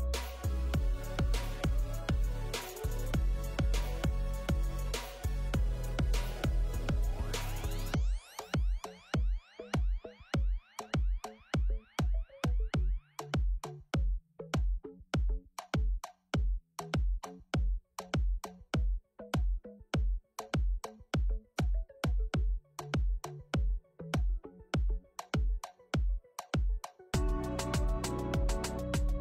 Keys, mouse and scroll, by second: 6.8 click, 16.2 right click, 16.8 click.